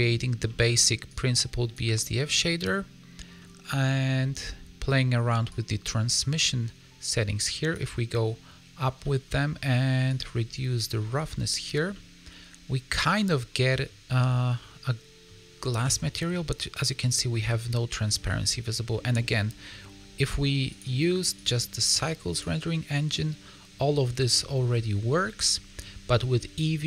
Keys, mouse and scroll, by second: 0.4-0.7 scroll down 3, 1.0 click, 3.3 middle click, 4.1-5.3 scroll up 4, 5.4 click, 9.0 middle click, 10.0 click, 11.9 middle click, 14.5 middle click, 15.5 scroll up 4, 15.7 middle click, 16.2 scroll down 2, 17.4 middle click, 18.9 scroll down 1, 20.6 click, 21.3 click, 24.1 middle click.